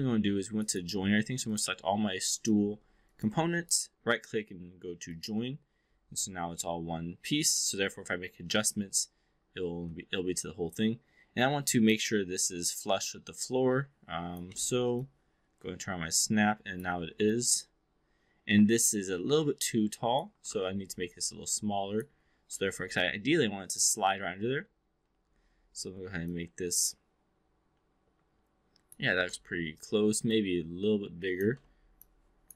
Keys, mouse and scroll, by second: 0.0 alt+middle click, 0.5-1.2 right drag, 1.4 click, 2.3 click, 3.0 shift+click, 3.8-5.2 right drag, 6.5 v, 11.3-11.9 drag, 12.4-14.4 drag, 14.5 x, 14.8-16.9 drag, 17.2-20.2 drag, 20.4 e, 20.5 r, 21.1-22.0 drag, 22.4 w, 23.0 click, 24.0 v, 26.1-29.0 drag, 29.1 e, 29.2 r, 30.2-31.4 drag, 31.5 w, 31.8 click.